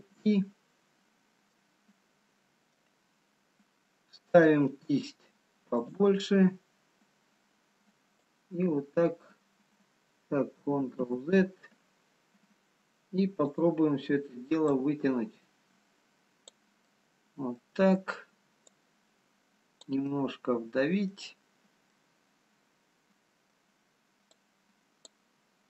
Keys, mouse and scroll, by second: 0.5 ctrl+i, 1.1-1.7 scroll down 2, 1.7 middle click, 7.1-7.9 scroll up 2, 7.1 f, 8.3 click, 11.4 ctrl+z, 13.4 click, 14.8 click, 16.8 middle click, 20.2 click, 21.5 middle click, 22.2 middle click, 24.7 click.